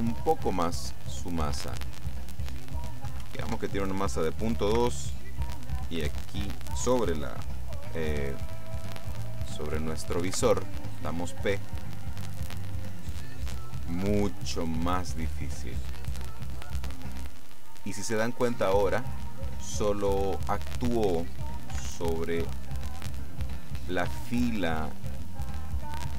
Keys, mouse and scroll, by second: 0.9 click, 2.1 click, 3.1 KP_Decimal, 3.3 KP_2, 3.5 KP_Enter, 4.8 p, 10.4 p, 21.8 Escape, 22.7-24.1 middle drag, 24.2-25.3 shift+middle drag.